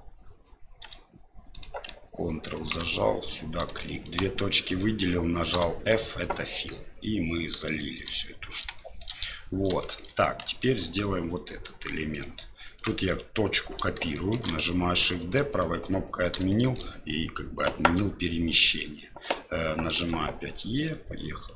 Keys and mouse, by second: 0.8 e, 3.9 shift+right click, 6.0 f, 7.7 middle click, 8.7 shift+middle click, 9.8 shift+middle click, 12.1 right click, 12.8 right click, 16.5 shift+middle click.